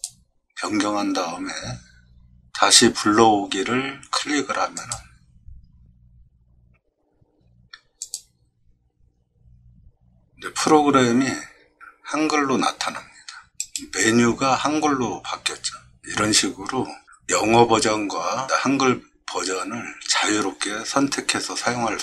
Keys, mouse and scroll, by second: 4.8 click, 8.0 click, 13.6 right click.